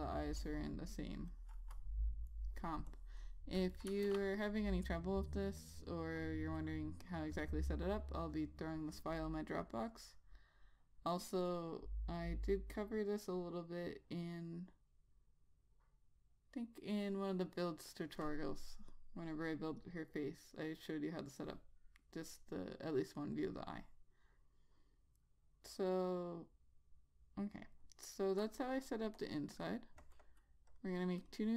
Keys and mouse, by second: 4.4 ctrl+s, 23.8 click, 23.9 double click, 29.5 click.